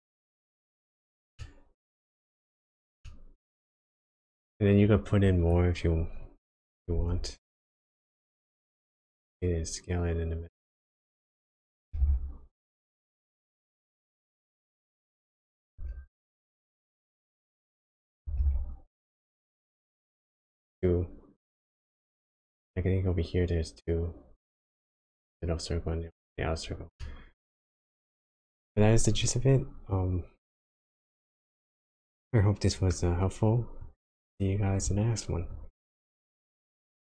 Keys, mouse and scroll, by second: 0.2 click, 1.3 middle click, 2.5-2.9 scroll down 2, 3.0 middle click, 4.7-5.4 scroll up 2, 5.4 click, 6.9 shift+d, 11.9 g, 15.7 s, 18.2 g, 19.9 click, 20.3 middle click, 27.0 middle click, 29.1 click, 29.9 click, 31.4-32.1 scroll down 4, 32.1 middle click, 33.0-33.8 scroll up 1, 33.8 click.